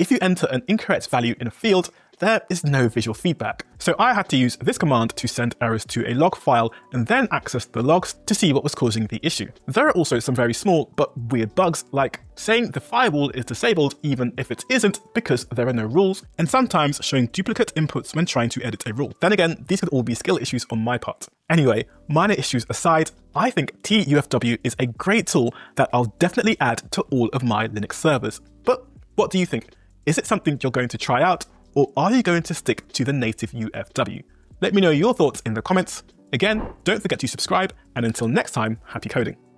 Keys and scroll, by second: 1.7 Tab, 16.4 Tab.